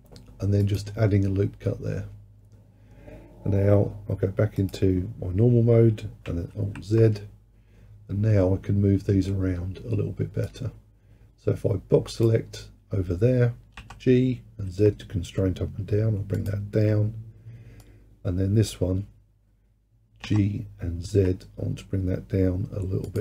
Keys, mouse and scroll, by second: 0.8-3.9 drag, 4.6-6.6 drag, 6.6 alt+z, 10.5 click, 13.8 g, 17.8 click, 20.3 g.